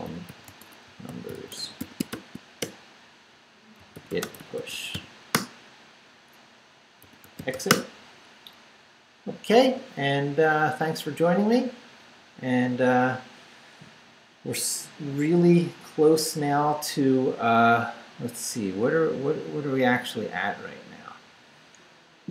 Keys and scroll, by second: 0.0-5.4 typing, 6.8-7.9 typing.